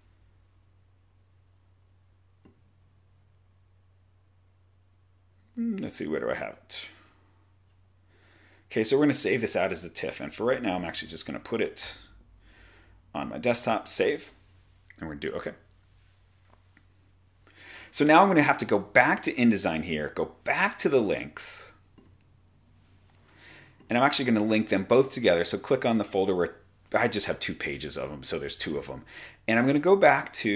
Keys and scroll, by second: 11.0 super+d, 11.9 Right, 17.9 super+Tab.